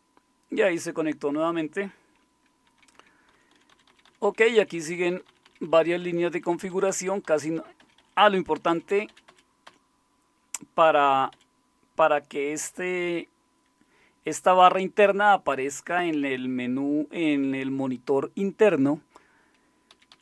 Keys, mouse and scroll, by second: 2.6 Down, 2.9 Down, 3.3 Down, 3.5 Down, 3.7 Down, 3.9 Down, 4.0 Down, 4.2 Down, 4.4 Down, 4.6 Down, 4.7-5.8 Down, 6.3 Down, 6.5 Down, 7.1 Down, 7.8 Up, 8.0 Up, 8.1 Up, 8.3 Up, 8.5 Up, 8.7 Up, 8.9 Up, 9.6 Up, 11.3 Up, 19.9 Down, 20.1 Down.